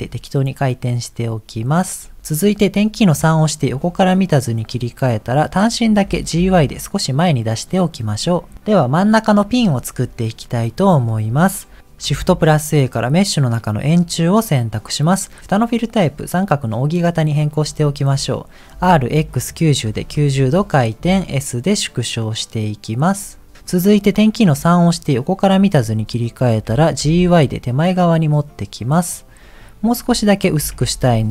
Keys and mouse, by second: 3.3 KP_3, 4.7 click, 5.1 click, 6.0 g, 9.7 middle click, 10.7 middle click, 12.2 shift+a, 15.7-17.2 drag, 18.7 r, 21.0 s, 24.3 KP_3, 26.5 g, 30.5 s.